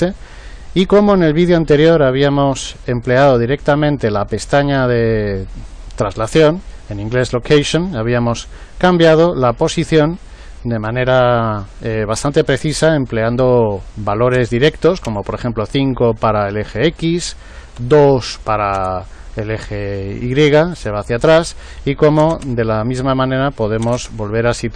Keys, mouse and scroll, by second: 8.1 click, 10.7 click, 16.8 click, 21.5-24.7 drag.